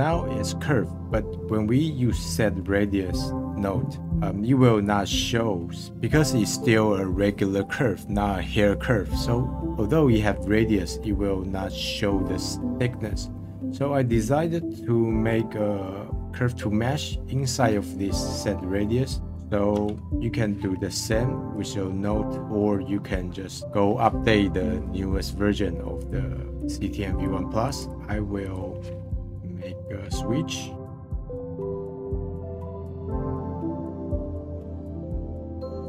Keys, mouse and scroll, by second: 4.2-5.9 scroll down 1, 5.9-8.4 middle drag, 10.8-13.0 middle drag, 13.0 scroll down 1, 13.3-14.4 middle drag, 14.4-14.8 scroll up 10, 15.5 scroll down 1, 21.1 click, 21.8 scroll down 2, 22.1-22.5 middle drag, 22.8-23.5 scroll down 10, 23.6-24.8 scroll up 7, 24.8-26.0 middle drag, 26.0 click, 26.5 click, 27.2 click, 27.9 scroll down 3, 28.1 shift+a, 32.2 middle click, 32.8-33.2 drag, 33.2-34.1 scroll up 2, 34.1 click, 34.7-35.2 scroll down 2, 34.9 middle click, 35.2 middle click.